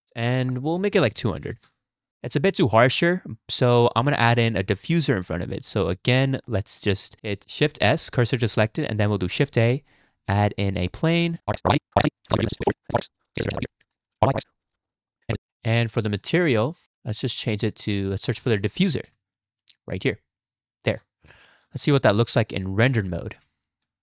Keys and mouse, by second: 0.4-1.7 drag, 1.4 0, 2.1 KP_0, 3.5 drag, 4.5 shift+middle click, 4.7 middle click, 5.8 shift+middle click, 6.5-7.0 drag, 7.7 shift+s, 9.3 shift+a, 11.5-15.4 typing, 11.9 ctrl+z, 12.4 click, 12.5 click, 12.8 click, 13.1 click, 13.6 click, 14.0 click, 14.5 click, 15.1 click, 15.4 click, 17.3-19.9 drag, 20.9 KP_0, 22.5 click, 23.2 z.